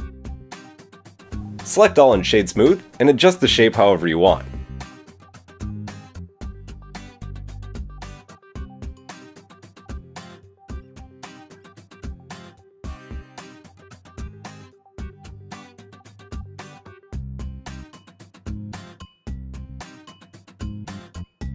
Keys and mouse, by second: 0.8 click, 0.8-2.1 middle drag, 1.3 a, 2.1-5.7 drag, 3.5 Tab, 3.8 middle click, 3.8 right click, 5.7-7.0 middle drag, 7.0 click, 7.1-10.0 middle drag, 10.4 KP_3, 12.0 Tab, 12.6 alt+click, 17.9 r.